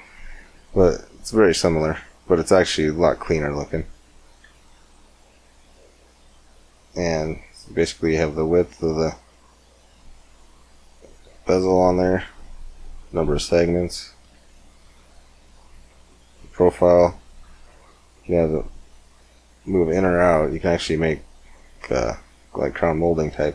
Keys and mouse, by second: 0.6 g, 2.2 middle click, 2.6 click, 2.7 middle click, 3.0-4.3 drag, 4.3 x, 4.5 click, 5.1-6.9 drag, 7.8-9.6 drag, 9.6-11.2 middle drag, 11.2 z, 11.5 z, 12.5-14.5 drag, 14.5-15.8 middle drag, 15.8-17.6 drag, 17.6 middle click, 20.0 middle click, 21.4 middle click, 22.4 middle click, 23.3-23.5 drag.